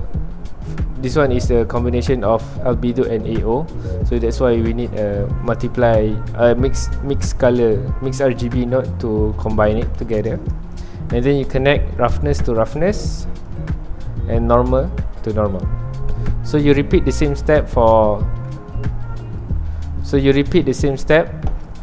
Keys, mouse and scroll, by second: 0.1-0.9 scroll up 1, 0.9-3.9 scroll up 1, 3.9-6.2 scroll up 1, 6.2-7.1 scroll up 1, 7.1-13.4 drag, 20.0 click.